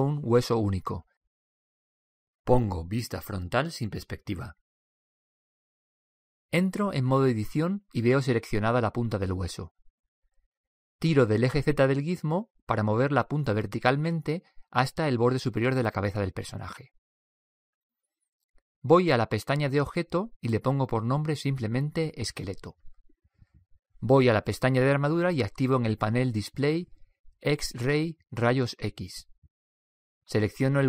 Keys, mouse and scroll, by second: 3.3 KP_1, 4.2 scroll up 1, 4.3-5.8 drag, 5.8-6.9 scroll up 1, 7.8 Tab, 11.3-13.0 drag, 20.3-22.0 drag, 27.7-30.8 drag.